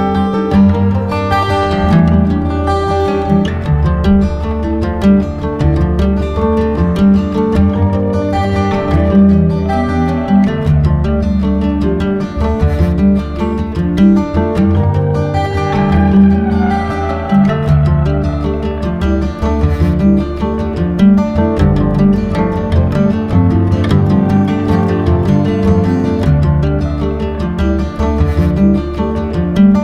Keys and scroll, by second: 2.0 space, 3.7 space, 10.4 space, 15.5 space, 20.4 space, 24.3 space, 28.4 space.